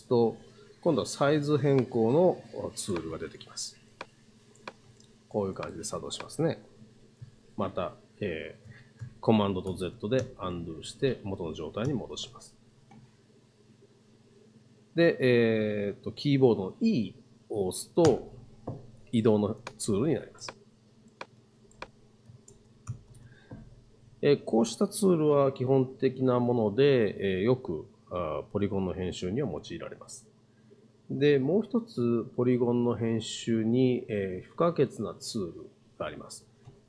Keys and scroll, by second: 9.7 super+z, 11.9 super+z, 18.1 e, 22.5 super+z.